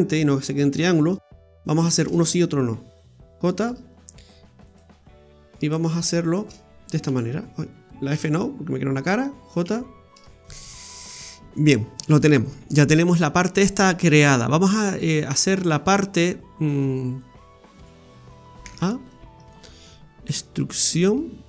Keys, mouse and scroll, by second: 0.5 shift+right click, 1.6 shift+right click, 4.6 right click, 6.2 shift+right click, 7.1 f, 8.2 ctrl+z, 9.7 j, 10.4 ctrl+z, 10.4-11.5 scroll down 10, 11.5-12.2 scroll down 2, 12.2 middle click, 12.2 scroll down 1, 18.6 a, 19.1 middle click, 20.4 e.